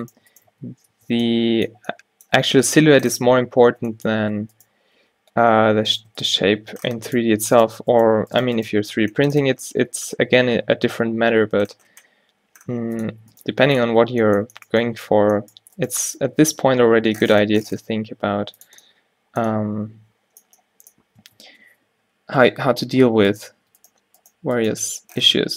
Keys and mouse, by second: 0.6 q, 1.0 Tab, 3.7 Tab, 5.0 g, 6.5 g, 7.2-11.3 right drag, 8.9 g, 13.4-15.5 drag, 13.6 g, 14.0 Tab, 15.3 Tab, 16.5 g, 21.4 Tab, 22.0 z, 22.5 z, 23.0 z, 23.7 Tab.